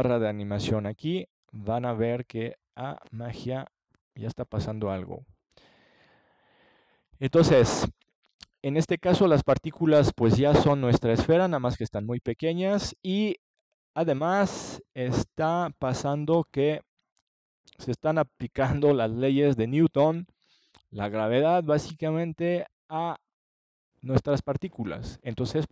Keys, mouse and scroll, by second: 5.4-8.3 middle drag, 17.4 click, 17.9 middle click, 18.6-20.9 drag, 21.6-25.7 drag.